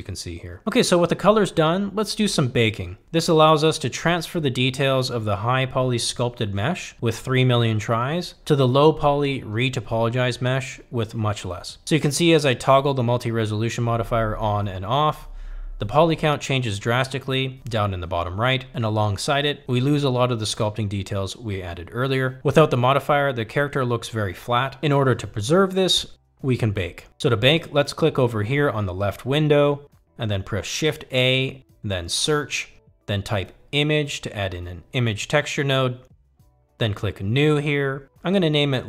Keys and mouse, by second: 2.3 click, 7.6 click, 10.8 click, 13.3-19.0 middle drag, 20.7 click, 21.7-24.8 middle drag, 24.8-25.4 drag, 25.4-27.4 middle drag, 32.2 shift+a.